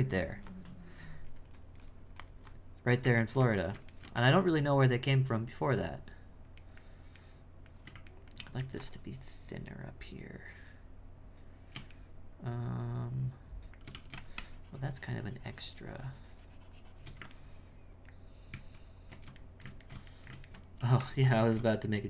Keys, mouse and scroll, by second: 3.3-8.6 ctrl+middle drag, 12.1-13.9 shift+middle drag, 14.4-17.4 shift+drag, 17.4-18.5 ctrl+middle drag, 18.5 ctrl+z, 19.4-20.8 shift+middle drag, 20.8 f, 21.5-22.0 ctrl+middle drag.